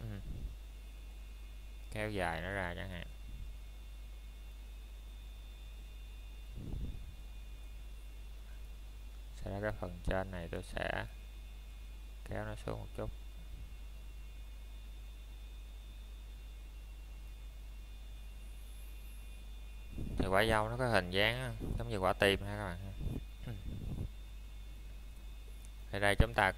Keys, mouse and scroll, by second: 4.5-5.0 scroll up 1, 6.8 click, 7.1-7.4 scroll down 1, 7.4 middle click, 8.2-8.7 scroll up 1, 8.7 middle click, 9.5-10.0 scroll up 1, 10.0 shift+middle click, 10.4-11.5 scroll up 1, 11.5 click, 11.9 scroll down 1, 12.3 shift+middle click, 15.1 s, 18.1 click, 19.3 w, 20.4 Escape, 22.2 click.